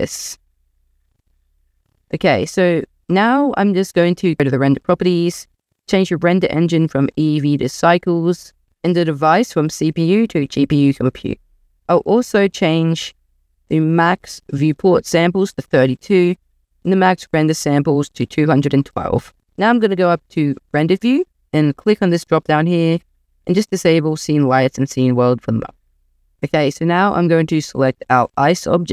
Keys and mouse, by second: 0.1 middle click, 0.3 middle click, 0.5 middle click, 5.2-6.1 drag, 6.8-7.7 drag, 9.5-10.5 drag, 14.9 click, 17.4-18.7 drag, 22.3-25.2 drag, 26.3-26.7 shift+middle drag, 27.9 click.